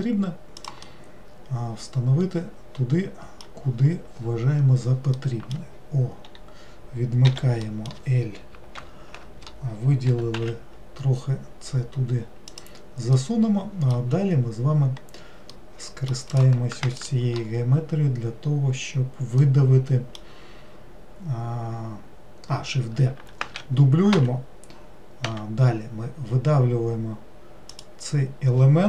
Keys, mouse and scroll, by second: 0.9-3.9 middle drag, 5.2-7.3 middle drag, 7.3 o, 7.6-8.8 middle drag, 8.8 ctrl+l, 13.2-15.0 middle drag, 15.0-15.6 scroll up 1, 15.6 middle click, 16.3 click, 17.0 shift+click, 19.4-22.6 middle drag, 23.4 shift+d, 25.3 e.